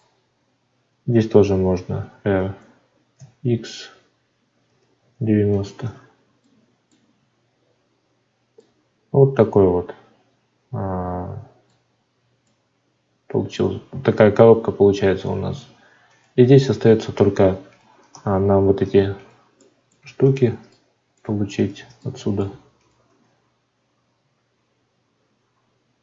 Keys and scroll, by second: 18.0 Tab.